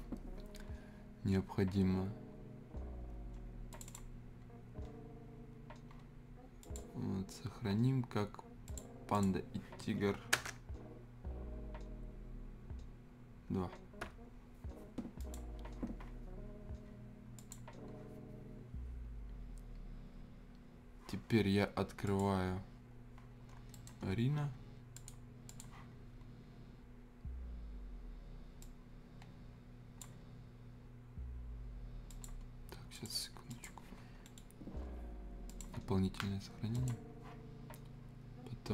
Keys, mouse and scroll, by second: 3.7 click, 6.6 click, 10.4 space, 14.0 2, 15.2 click, 22.0 click, 23.7 scroll down 1, 23.7 right click, 24.0 scroll up 1, 25.0 click, 28.6-32.1 drag, 32.9 click, 34.2 middle click, 35.5 click.